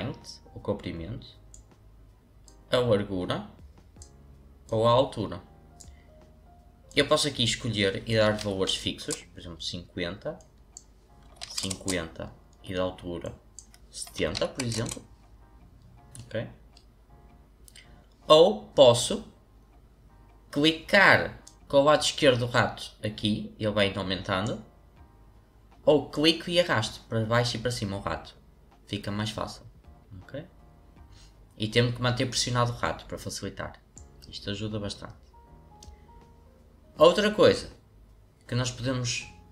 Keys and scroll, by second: 8.0-8.9 typing, 9.0 Return, 11.2 typing, 11.7 Return, 13.9-14.6 typing, 14.7 Return, 16.2 typing.